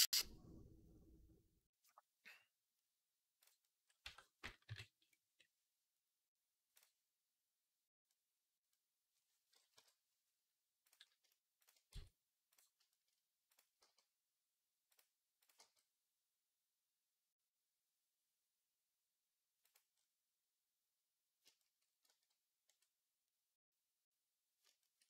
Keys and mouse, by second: 3.9 Tab, 4.5 right click, 4.5 KP_3, 7.7-11.1 drag, 7.7-11.1 middle drag, 7.7-11.1 right drag, 9.6 KP_3, 11.7 x, 13.6 g, 14.7 click, 15.2 right click, 15.4 g, 19.4-22.6 drag, 22.6-25.0 right drag.